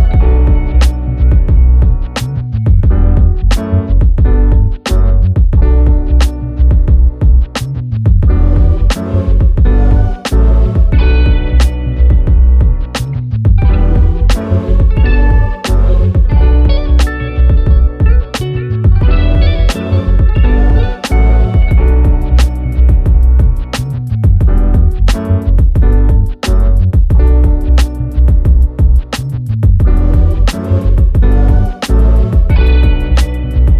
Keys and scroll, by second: 1.7 ctrl+a, 22.1 ctrl+z.